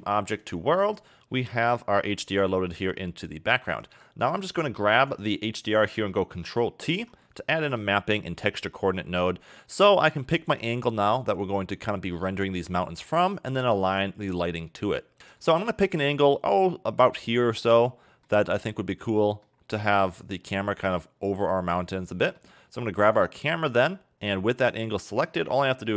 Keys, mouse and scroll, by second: 1.1-1.4 scroll up 5, 1.4 middle click, 1.7-2.2 scroll up 5, 2.6 a, 2.8 a, 3.7-4.2 scroll down 4, 4.2 middle click, 4.9 click, 6.8 ctrl+t, 7.2 scroll down 2, 7.4 middle click, 7.8-9.4 scroll up 7, 9.4-10.1 scroll up 6, 10.1 scroll down 2, 10.3 middle click, 12.9-14.7 scroll down 2, 14.8-15.4 scroll up 1, 15.4 shift+middle click, 19.5-20.0 scroll up 2, 20.0 scroll down 1, 20.2 shift+middle click, 23.0 click, 23.8 middle click.